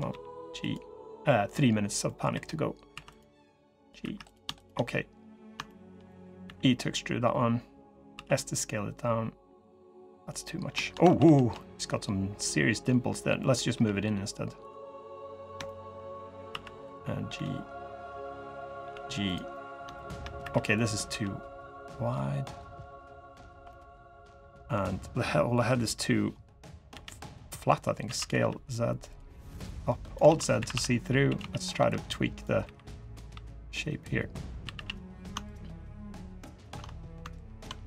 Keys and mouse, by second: 1.0 click, 1.8 click, 2.1 3, 2.7 2, 2.9 click, 3.1 g, 3.8 3, 4.6 click, 5.4 shift+click, 5.8 click, 6.8 e, 7.9 s, 9.6 click, 10.8 ctrl+z, 11.0 ctrl+z, 11.3 click, 13.1 click, 13.5 g, 14.7 click, 15.4 shift+click, 15.8 click, 16.2 1, 16.6 click, 17.1 g, 18.6 g, 19.3 click, 19.7 shift+drag, 20.2 3, 20.8 g, 23.4 click, 24.4 drag, 25.3 KP_3, 26.7 l, 27.8 s, 29.7 click, 30.0 alt+z, 30.3-32.9 typing, 34.4 a, 34.5 a, 35.4-37.5 ctrl+drag, 37.6 g.